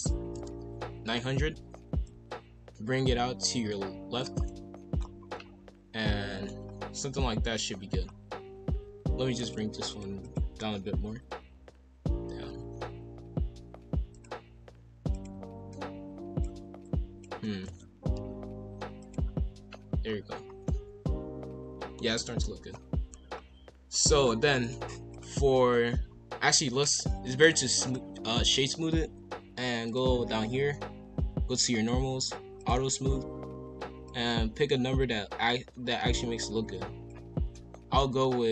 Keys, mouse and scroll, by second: 2.0 click, 4.5 middle click, 5.0 scroll down 1, 5.3-6.6 middle drag, 6.6 scroll down 1, 6.9 middle click, 7.1 KP_1, 7.3 KP_3, 7.9-8.2 scroll up 2, 8.3 KP_5, 8.4 KP_1, 9.4 alt+click, 9.9 alt+click, 10.2 alt+click, 14.1-15.2 drag, 15.7 click, 16.8 click, 17.6 ctrl+z, 18.1 g, 19.3-20.0 scroll down 1, 20.0-20.4 scroll down 2, 20.4 scroll up 1, 20.7-22.0 middle drag, 22.0 KP_5, 22.1 KP_1, 22.2 KP_3, 22.7 scroll up 1, 23.0 scroll down 1, 23.3 scroll up 2, 24.6-26.8 drag, 26.8-27.9 right drag, 27.9-29.8 middle drag, 29.8 click, 31.5-32.7 drag, 34.0-37.1 drag, 37.5-38.2 middle drag, 38.2 scroll up 2.